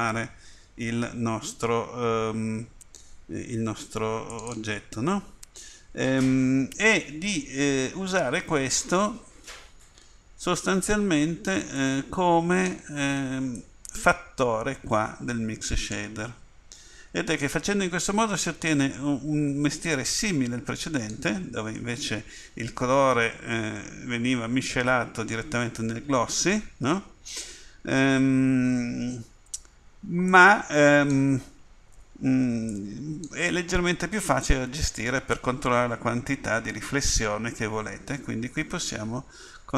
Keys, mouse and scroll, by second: 35.7 click, 36.8 click.